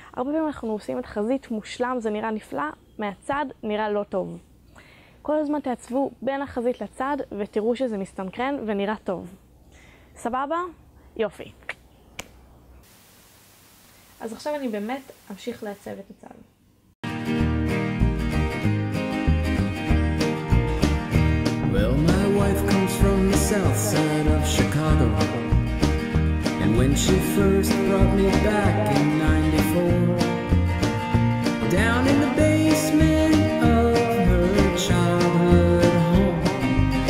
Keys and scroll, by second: 17.0 b, 18.8 a, 19.1 b, 22.0 a, 22.5 b, 24.4 a, 24.9 b, 27.6 a, 28.1 b, 30.6 a, 31.1 b, 34.8 a, 35.2 b.